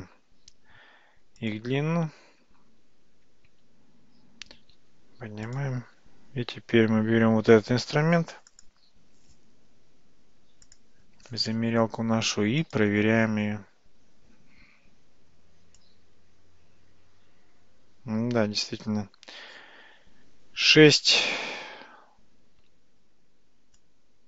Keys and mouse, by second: 1.2 Tab, 1.5 click, 3.5 Tab, 4.7 g, 5.8 Tab, 8.6 click, 10.8-11.7 drag, 15.8-23.8 drag.